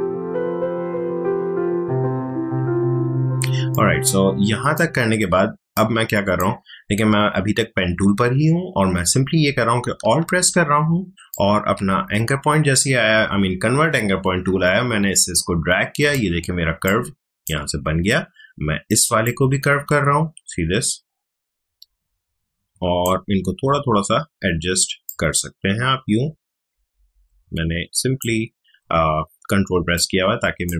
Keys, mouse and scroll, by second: 0.0-0.8 typing, 0.4 click, 0.6 click, 1.7 click, 3.1 space, 3.7 click, 3.8 space, 5.7 click, 6.0 space, 7.1 alt+scroll up 1, 7.4-7.7 alt+scroll down 1, 7.7 alt+scroll up 1, 8.3 alt+scroll down 1, 11.3-16.8 alt+drag, 16.8 space, 16.8 click, 17.2 space, 19.2-25.0 alt+drag, 29.8 space, 29.9 click, 30.2 space.